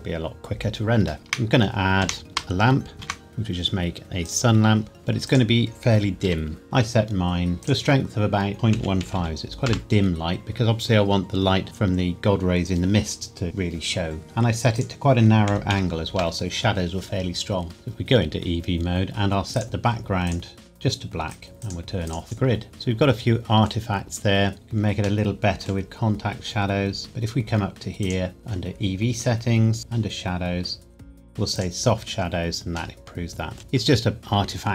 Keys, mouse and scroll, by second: 1.2 shift+s, 2.0 Escape, 2.2 ctrl+a, 3.1 shift+a, 4.2 click, 4.8 scroll down 1, 4.9 g, 5.3 click, 5.7 middle click, 6.2 r, 7.5 click, 8.8 KP_Decimal, 9.0 KP_1, 9.2 KP_5, 9.7 KP_Enter, 14.8 click, 15.5 KP_Decimal, 15.7 KP_1, 16.1 KP_Enter, 17.7 click, 22.7 middle click, 24.5 click, 25.2 middle click, 28.0 click, 29.8 click, 30.1 scroll down 1, 31.6 click, 33.0 middle click.